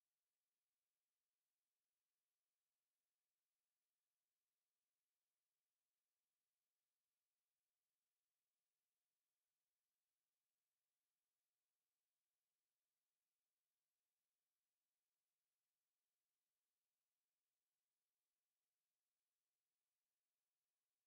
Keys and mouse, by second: 5.1-9.0 middle drag, 9.0-10.8 drag, 10.8-13.0 middle drag, 10.8 z, 11.5 z, 13.0-14.4 drag, 16.4-17.3 middle drag.